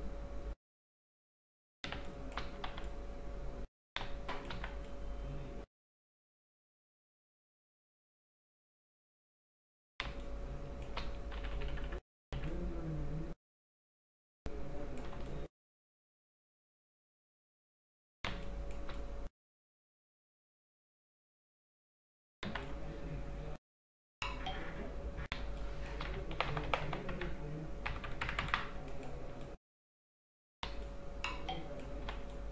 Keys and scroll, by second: 2.0 space, 2.8 x, 4.1 space, 4.6 x, 10.2 space, 11.5 ], 15.2 space, 18.4 space, 22.5 x, 25.5 space, 26.4 ctrl+KP_Subtract, 28.0 ctrl+KP_Add, 28.7 space, 32.1 x.